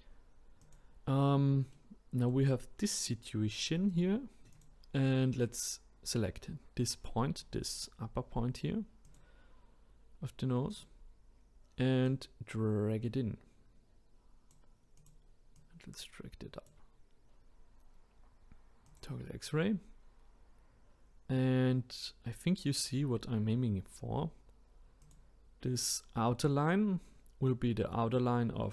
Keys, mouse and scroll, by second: 0.6-1.7 drag, 1.7 middle click, 2.6-4.5 scroll down 2, 4.5 click, 5.4-7.4 scroll up 2, 7.4-9.0 middle drag, 9.0 click, 10.7 click, 12.0 click, 15.0 click, 18.8-22.0 drag, 22.8 scroll up 1, 24.0-25.0 scroll down 1, 25.0 click.